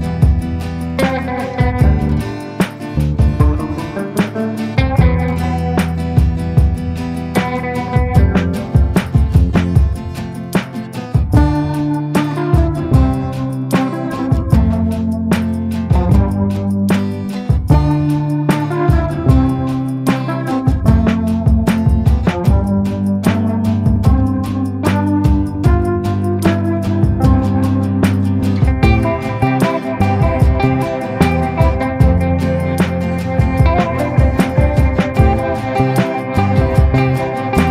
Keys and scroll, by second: 0.0 r, 0.4 F3, 1.0 Escape, 2.4 ctrl+g, 3.0 c, 3.4 Escape, 3.8 F2, 8.5 ctrl+Page_Down, 9.3 F4, 10.4 Escape, 12.1 c, 13.6 F2, 17.0 c, 23.9 F3, 24.2 F2, 28.7 r, 29.5 ctrl+z, 30.5 ctrl+r, 31.9 ctrl+r, 32.8 F3, 36.0 F2, 37.4 shift+Page_Up.